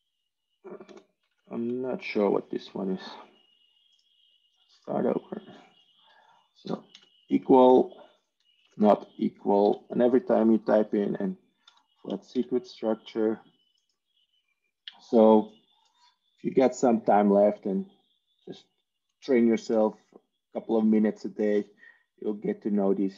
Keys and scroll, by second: 0.0-1.1 typing, 2.2-3.3 typing, 6.3-7.0 typing, 11.3-12.3 typing.